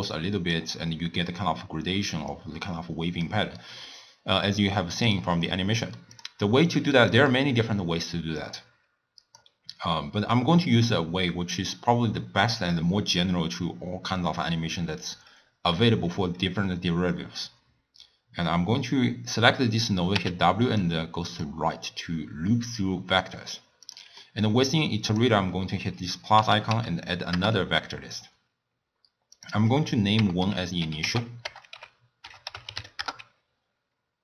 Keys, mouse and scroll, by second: 0.0-3.4 typing, 0.2 click, 2.3 click, 3.6-5.2 right drag, 5.2 d, 5.4 d, 5.8 middle click, 6.2 click, 6.7 click, 8.4-11.4 drag, 20.2 w, 24.2-25.1 middle drag, 25.1-28.9 drag, 29.4-32.4 drag.